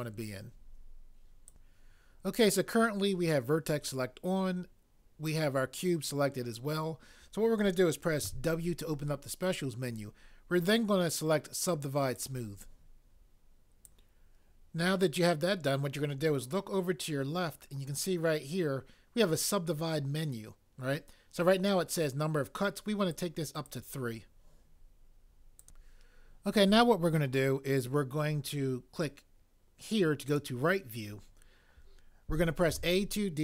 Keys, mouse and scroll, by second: 1.5 click, 1.7 click, 8.2 w, 14.0 click, 23.1 click, 25.8 click, 30.3 click, 32.7 a.